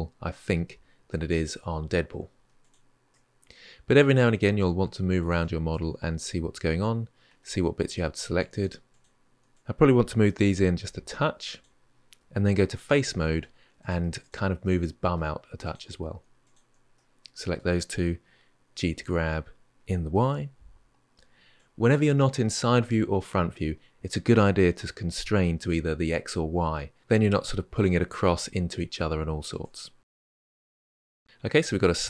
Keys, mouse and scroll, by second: 2.4 alt+click, 2.9-5.0 middle drag, 5.0 alt+click, 5.5-7.6 middle drag, 7.6 click, 8.2 shift+click, 8.7 click, 9.3 shift+click, 10.1 g, 12.3 3, 12.7-13.6 middle drag, 13.6 click, 14.0 shift+click, 14.4-15.4 middle drag, 15.4 click, 16.2 shift+click, 16.7-18.7 middle drag, 18.7 g, 21.7-23.2 middle drag, 27.0 g, 29.9-31.0 middle drag.